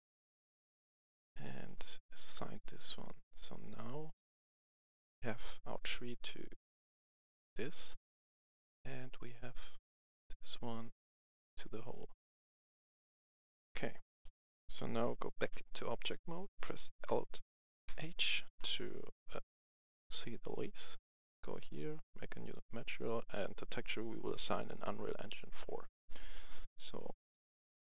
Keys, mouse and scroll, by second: 1.5 right click, 2.3 click, 13.0 a, 14.1 F11, 14.4 F10, 15.3 Tab, 17.8 alt+h, 18.7-19.5 scroll down 1, 19.9 right click, 21.5-27.9 drag.